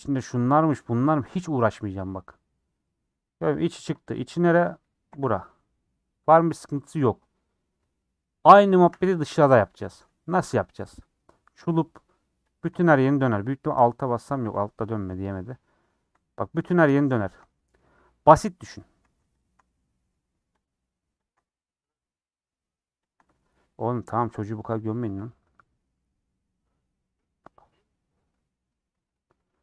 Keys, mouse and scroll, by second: 3.8 3, 4.2 click, 5.1 l, 7.4 scroll down 2, 7.6-8.8 middle drag, 8.8 2, 9.7-11.0 middle drag, 11.0 click, 11.4-12.5 middle drag, 12.5 ctrl+click, 14.8 middle click, 15.7 ctrl+click, 16.2 middle click, 17.1 ctrl+Left, 17.5 middle click, 18.4 ctrl+Left, 19.0 ctrl+z, 19.3 ctrl+Left, 19.7 middle click, 20.6 ctrl+Left, 21.2 ctrl+Left, 21.4-23.1 middle drag, 23.1 ctrl+Left, 23.3 middle click, 23.9 scroll down 1, 24.0-29.1 middle drag, 29.1 scroll down 3, 29.4 middle click.